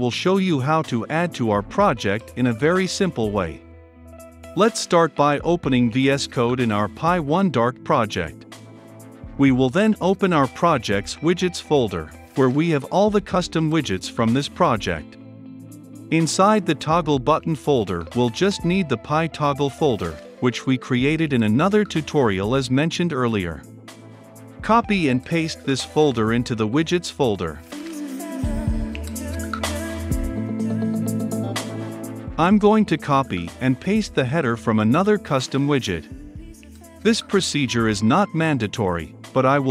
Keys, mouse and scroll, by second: 0.3-1.8 middle drag, 1.8-5.3 drag, 8.2 click, 8.8 click, 24.4-28.9 drag, 30.8 click, 36.2 ctrl+c, 37.1-38.5 drag, 38.6 ctrl+v, 39.2-39.7 drag.